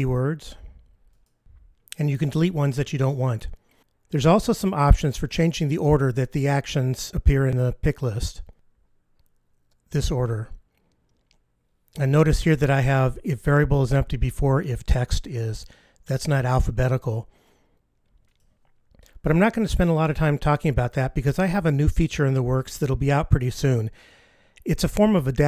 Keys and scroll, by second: 8.5 F15, 18.6 ctrl+F15.